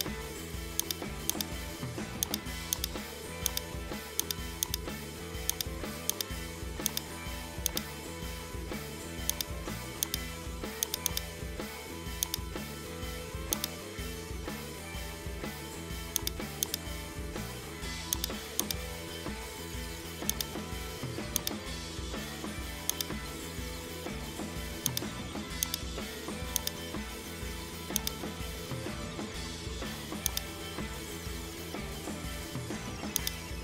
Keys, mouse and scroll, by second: 0.2 scroll up 1, 0.4-0.8 scroll down 1, 0.8 right click, 1.3 click, 2.7 right click, 3.5 click, 4.2 right click, 4.7-5.5 drag, 6.1 right click, 6.9 shift+right click, 7.7-9.2 drag, 10.1 right click, 10.8-12.4 drag, 13.6 right click, 14.1 s, 16.7 right click, 17.6 g, 18.6 right click, 18.8 g, 21.4 right click, 21.8 g, 24.9 click, 25.7 right click, 26.6 click, 28.0-29.5 drag, 30.9-32.1 shift+middle drag, 32.1 KP_1, 32.4 shift+middle drag, 32.7-33.2 scroll up 1, 33.2 right click.